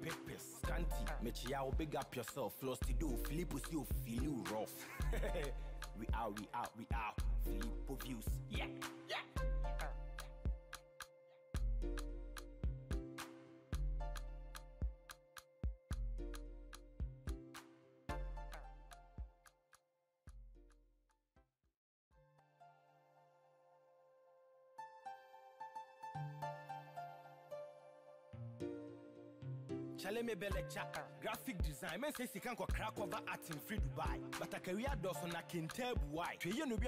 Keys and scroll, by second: 1.1 ctrl+t, 5.9 Return.